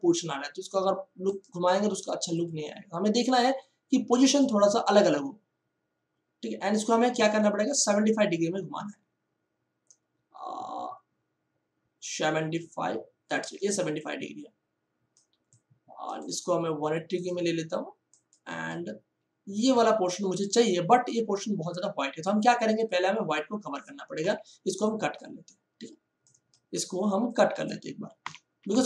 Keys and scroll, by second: 24.2 m, 28.2 Delete.